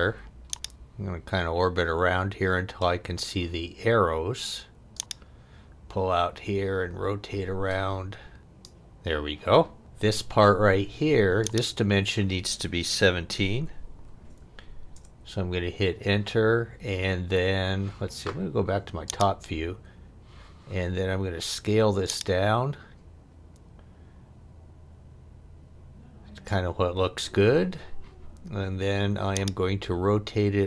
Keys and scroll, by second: 13.5 1, 13.9 7, 14.9 Return.